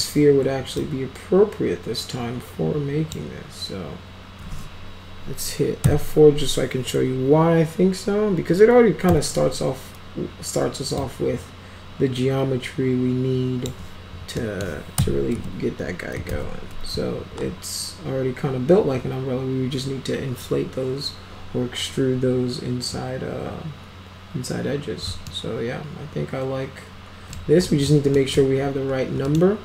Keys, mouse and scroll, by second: 0.8-3.1 drag, 5.9 F4, 9.1 e, 11.0-13.7 drag, 14.4 middle click, 15.4 F3, 16.3 alt+x, 25.3-27.4 alt+middle drag, 27.7 middle click, 28.2 middle click, 29.3 middle click.